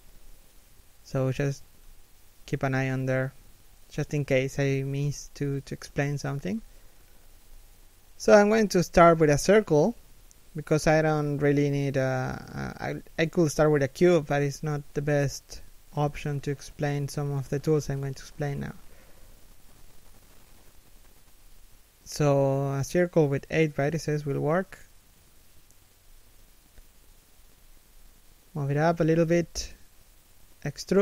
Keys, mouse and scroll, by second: 21.3-22.3 scroll up 1, 22.3 shift+middle click, 22.7 middle click, 24.8 KP_1, 26.3-26.7 scroll down 1, 26.7 shift+middle click, 27.6 g.